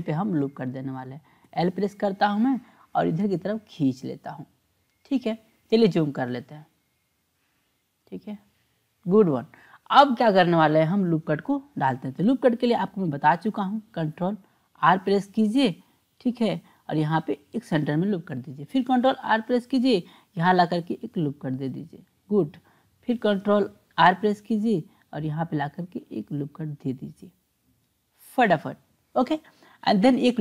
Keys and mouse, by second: 1.4 l, 1.6 l, 2.7-4.5 drag, 5.7-7.3 drag, 8.4-9.4 drag, 12.3 click, 14.8 ctrl+r, 19.0 ctrl+r, 24.0 ctrl+r.